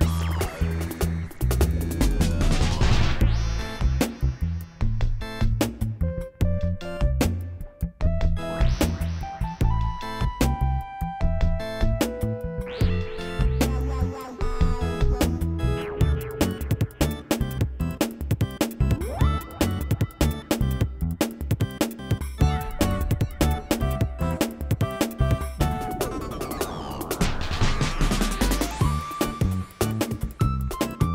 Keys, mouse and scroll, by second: 0.0 middle click, 0.6 middle click, 2.9 middle click, 3.2 middle click, 4.0 click, 4.8 Tab, 5.0 Tab, 5.2 click, 5.8 click, 6.1 g, 6.6 click, 7.3 g, 8.0 g, 9.0 click, 10.0 Tab, 10.1 Tab, 10.4 z, 11.1 Tab, 11.7 Tab, 12.0 click, 12.3 Tab, 12.4 click, 13.6 Tab, 14.1 Tab, 14.3 Tab, 14.7 click, 15.0 ctrl+a, 16.7 g, 18.6 KP_1, 19.2 KP_7, 19.6 click, 22.2 shift+a, 22.3 shift+s, 22.9 click, 23.5 KP_1, 23.8 r, 24.5 click, 25.5 r, 26.5 KP_7, 27.1 click, 27.5 r, 28.7 r, 30.3 click, 30.9 click.